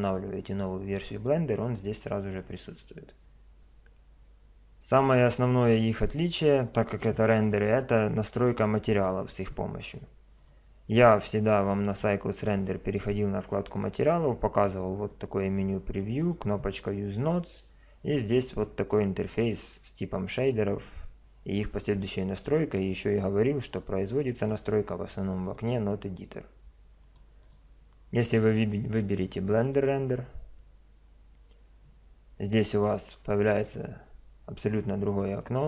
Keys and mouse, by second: 1.1 click, 10.4 click, 12.8 click, 15.0-17.9 drag, 24.4 click, 27.5-30.1 drag, 35.1 click.